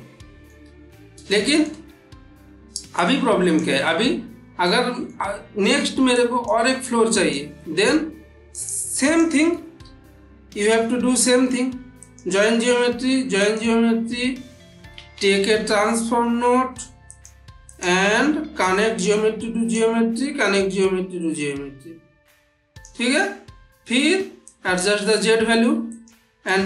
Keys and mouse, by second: 1.2-1.8 shift+middle drag, 3.1-3.4 click, 3.7 middle click, 4.5-5.1 middle click, 6.0-6.6 drag, 7.4-8.0 middle click, 8.4 click, 9.7 shift+a, 11.9 click, 13.3 click, 15.0 shift+a, 17.0 click, 18.4-19.8 drag, 24.3 click, 25.0-25.6 ctrl+middle click, 25.8 click, 26.3-26.6 ctrl+middle click.